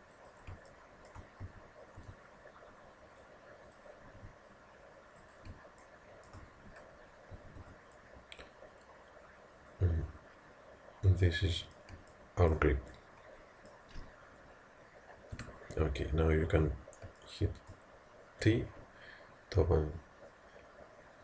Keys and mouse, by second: 1.5 a, 2.0 b, 4.2 g, 5.9-7.6 middle drag, 7.3 z, 7.6 Tab, 12.1-14.5 middle drag, 15.3 KP_1, 17.2-21.2 middle drag, 18.5 t.